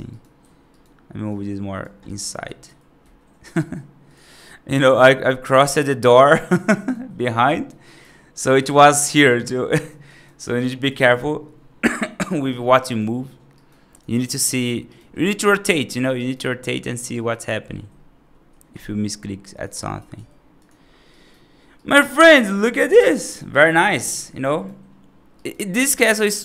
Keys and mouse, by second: 0.0 right click, 0.3 1, 0.6 right click, 1.3 click, 1.9 right click, 2.2 g, 4.2 right click, 4.8 middle click, 5.3 right click, 5.9 right click, 6.7 right click, 7.3 right click, 7.7 right click, 8.3 g, 9.2 right click, 9.9 right click, 10.3 right click, 10.7 ctrl+z, 12.4 right click, 12.7 right click, 13.4 right click, 13.8 click, 14.3 3, 14.5 click, 14.7 right click, 15.5 middle click, 16.0 right click, 17.0 right click, 17.5 middle click, 18.6 i, 19.6 right click, 20.0 g, 21.0 right click, 21.7 right click, 21.9 middle click, 22.3 F2, 22.5 drag, 22.8 right drag, 23.1 right drag, 23.4-23.8 right drag, 24.0-24.5 right drag, 25.2 right click, 25.6 middle click, 26.0 right drag.